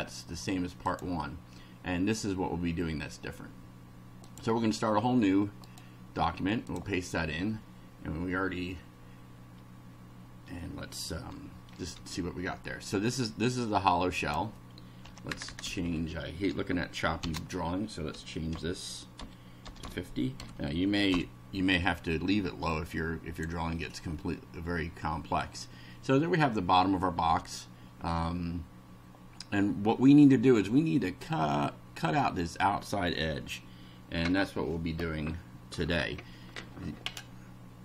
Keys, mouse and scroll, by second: 0.8 click, 4.3 click, 5.6 right click, 6.7 click, 12.0 F5, 14.2 click, 15.1 Home, 15.3 Return, 15.7 Up, 17.2-20.3 typing, 21.1 F5, 22.7 click, 23.7-24.4 scroll up 2.